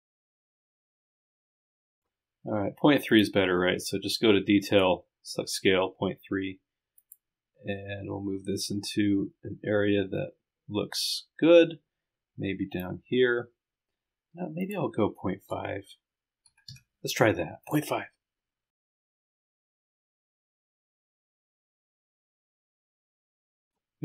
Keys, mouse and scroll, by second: 1.9 click, 3.1 click, 8.9-13.1 drag, 18.7 click, 21.2 click, 21.6 click, 21.8 scroll up 1, 22.6 scroll down 2, 23.0 click.